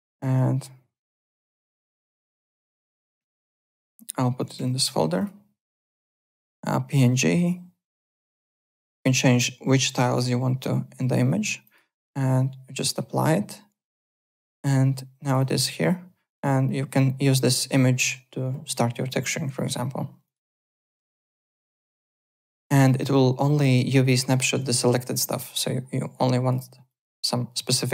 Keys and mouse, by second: 3.2 click, 4.3 click, 5.1 click, 5.7 click, 11.6 click, 12.9 click, 14.0 click, 15.2 click, 20.2 click, 20.8 click, 21.6 click, 22.8 middle click, 24.2-25.1 typing, 26.0 click, 26.9 click.